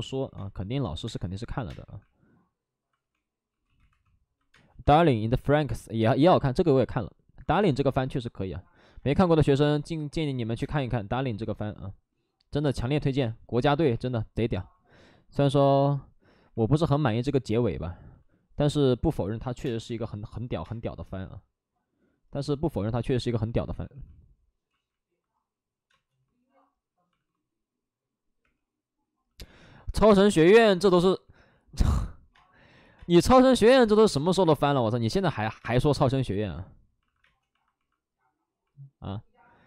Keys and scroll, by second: 0.3-1.8 typing, 3.6 ctrl+z, 3.6 3, 3.8 2, 4.4 space, 7.4 ctrl+z, 7.5 space, 7.8 1, 10.2 1, 10.4 ctrl+z, 10.4 space, 10.4 1, 10.7 1, 13.1 space, 13.9 space, 13.9 2, 18.9 alt+s, 19.0-20.6 typing, 21.0 alt+s, 22.9-24.3 typing, 24.6 ctrl+z, 25.8 space, 27.1 alt+s, 28.3 3, 29.8 alt+s, 32.3 space, 32.9 space, 33.8 alt+s, 34.0 space, 35.3 ctrl+z, 35.5 space, 36.9 alt+s, 37.2 space.